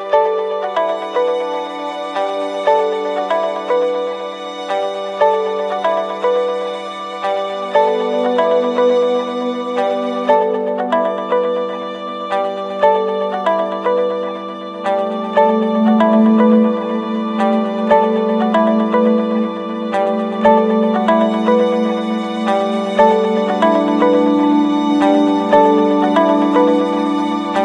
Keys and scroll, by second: 3.9 ctrl+-, 10.6 ctrl+-, 11.1 ctrl+space.